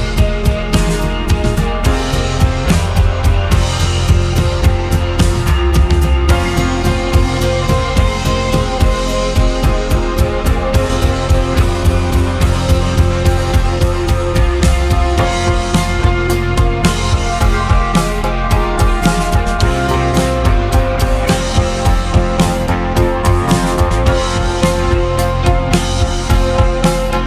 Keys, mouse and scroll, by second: 0.3 click, 1.2 click, 2.6 ctrl+z, 3.6 shift+click, 4.5 shift+click, 5.6 g, 12.0-13.6 middle drag, 13.6-14.6 scroll down 2, 14.6-16.7 middle drag, 16.7 Tab, 17.6 click, 18.3 click, 20.2 click, 21.0 click, 22.2 l, 22.6 click, 23.0 l, 23.4 click, 24.5 Tab, 24.9 click, 26.1 l.